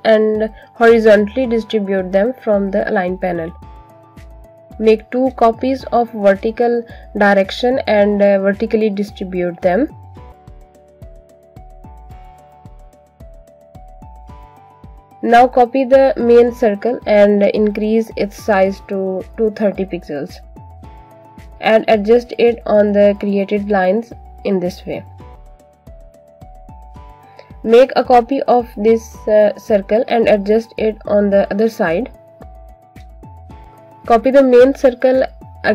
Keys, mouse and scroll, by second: 0.0 shift+click, 0.9 shift+click, 2.1 click, 6.3 alt+click, 7.8 alt+Num_Lock, 8.0-8.3 alt+scroll up 2, 8.3 click, 9.2 click, 9.7 shift+click, 10.6 click, 13.3 space, 13.6 click, 13.9 space, 14.3-14.8 alt+scroll down 1, 14.9 click, 15.6 ctrl+c, 15.8 ctrl+f, 17.0 click, 19.9 alt+shift+click, 23.4 click, 28.1-29.2 typing, 30.8 click, 34.3 click.